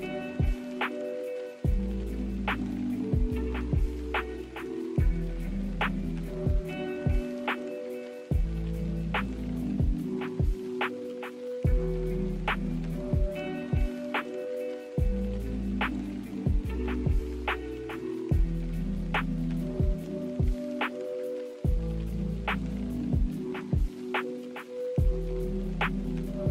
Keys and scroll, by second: 0.0 b, 1.5 z, 3.6-4.5 typing, 13.4-14.5 typing, 23.3 ctrl+h, 26.4 b.